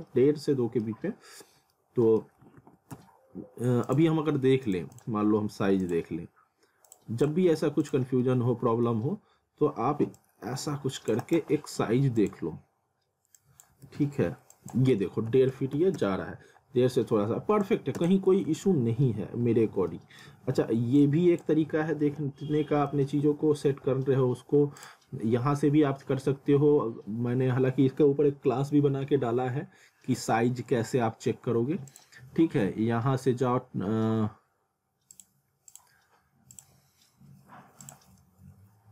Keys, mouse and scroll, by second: 0.1 alt+middle click, 1.1-1.6 scroll down 1, 1.7 alt+middle click, 2.4 alt+w, 3.0 z, 3.9 click, 8.2 middle click, 9.1 scroll up 1, 10.2 click, 11.2 right click, 12.2 click, 13.8 ctrl+z, 14.5 click, 17.6 click, 18.5 alt+w, 19.9 alt+middle click, 21.0 click, 23.1 alt+w, 24.8 click, 32.3 click, 35.1 click.